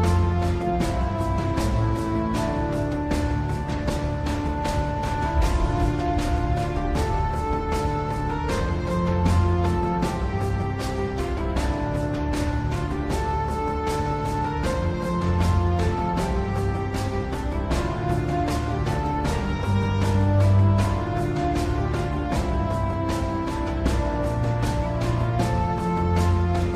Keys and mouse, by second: 0.4 click, 1.1 g, 3.9 KP_1, 4.8 shift+middle click, 10.5 KP_3, 13.4 g, 16.5 middle click, 16.7 KP_1, 19.5 click, 25.0 click, 26.0-26.7 drag.